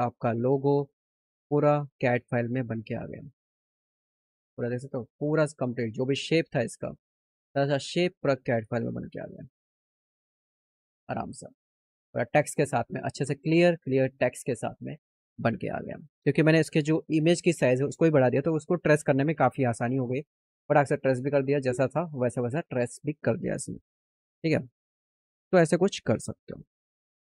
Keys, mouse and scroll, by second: 0.3 click, 1.1 click, 1.9 click, 3.7 click, 5.2-7.2 drag, 9.0 middle click.